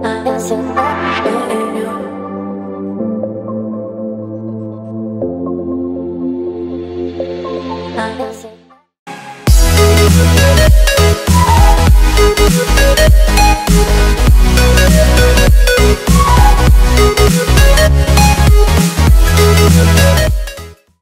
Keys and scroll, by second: 0.6 v.